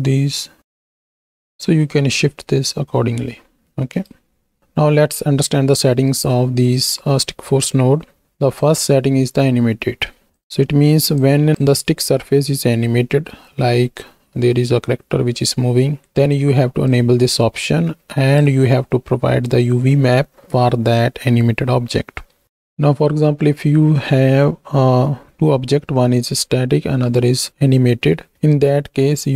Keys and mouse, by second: 3.8 right click, 4.5 Tab, 4.8-5.8 drag, 6.6 middle drag, 8.7 click, 10.6 middle click, 11.3 click, 12.7-13.2 middle drag, 16.1 middle click, 16.8-18.3 drag, 29.2 middle click.